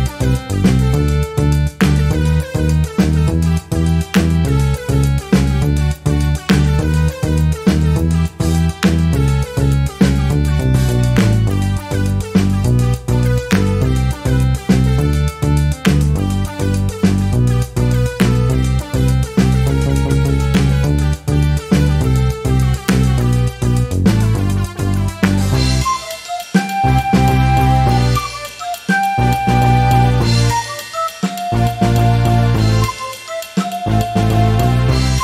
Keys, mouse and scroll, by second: 0.2-3.1 drag, 3.8-5.2 drag, 5.4-7.2 drag, 7.5 shift+click, 8.9 ctrl++, 10.2 click, 11.0-13.8 drag, 14.0 click, 15.0 ctrl+z, 21.3-22.6 drag, 23.0 click, 23.7-25.4 drag, 27.8 click, 28.6 click, 29.6 click, 30.9 click, 32.0 click, 33.3 ctrl+d, 33.9-35.1 ctrl+drag.